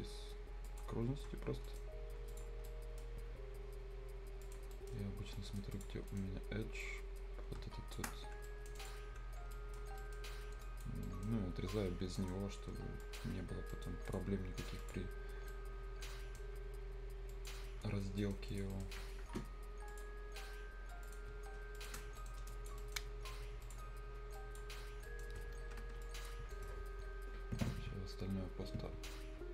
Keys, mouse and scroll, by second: 0.0 scroll up 1, 0.7 click, 1.0 scroll down 1, 1.7 right click, 1.9 scroll up 1, 2.3 click, 2.7 right click, 3.5 scroll down 1, 4.4 click, 4.7 right click, 5.0 scroll down 1, 5.4 right click, 5.7 click, 6.0 scroll up 1, 6.1 right click, 6.8-8.5 drag, 8.5 right click, 8.8 click, 9.5 right click, 9.8 scroll down 1, 10.0 right click, 10.3-10.6 scroll up 1, 10.6 click, 11.0 right click, 13.0 click, 13.3 scroll down 1, 13.5 scroll up 1, 13.7 right click, 14.1 click, 15.2 scroll down 1, 15.3 scroll up 1, 15.5-17.3 right drag, 17.3 click, 17.7 scroll down 1, 18.2 right click, 18.5 click, 18.5 click, 18.7 right click, 19.9 click, 21.1 click, 21.3-21.8 scroll down 1, 21.8 shift+click, 22.2 right click, 22.5 click, 22.8 right click, 23.6 click, 24.8-25.1 scroll down 1, 25.1 right click, 25.4 scroll up 1, 25.7 Escape, 26.0 click, 26.5 scroll up 1, 26.5 middle click.